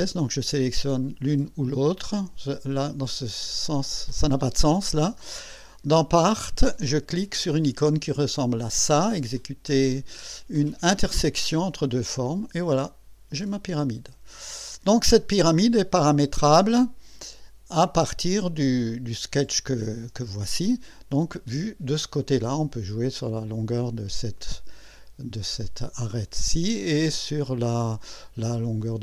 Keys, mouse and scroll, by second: 0.8 click, 1.6 ctrl+click, 11.6 click, 12.9-13.6 drag, 13.8 scroll up 1, 15.7-16.5 drag, 18.9 click, 19.9 click, 20.2 n, 20.5 space, 21.3 click, 22.4 click, 24.4-25.0 drag, 25.6-26.4 drag.